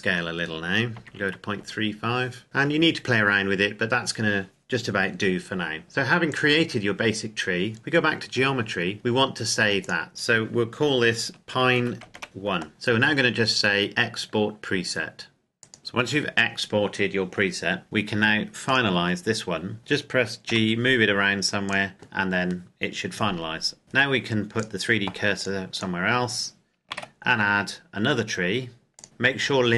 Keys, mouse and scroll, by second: 0.8 KP_Decimal, 1.0 KP_5, 1.5 KP_Enter, 2.4 scroll down 1, 5.8 click, 9.8 click, 11.6-12.4 typing, 12.7 click, 15.6 click, 18.6 right click, 20.4 g, 21.6 click, 24.5 click, 26.9 shift+a, 28.9 click.